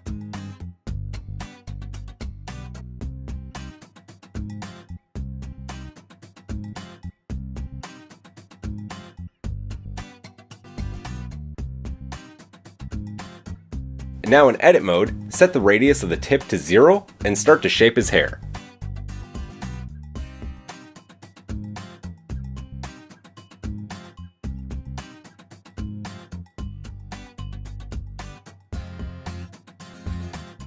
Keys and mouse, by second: 7.6 g, 8.7 click, 11.6-13.2 shift+drag, 13.8 click, 14.3 Tab, 14.7 shift+click, 16.0-19.4 middle drag, 16.7 alt+s, 19.4-23.3 drag, 23.1 middle click, 23.1 right click, 23.9 shift+click, 23.9 shift+middle click, 23.9 shift+right click, 24.4 shift+click, 24.4 shift+middle click, 24.4 shift+right click, 25.0 shift+click, 25.0 shift+middle click, 25.0 shift+right click, 26.2-30.1 drag, 27.5 g, 30.1 middle click, 30.5 click, 30.6 shift+middle drag.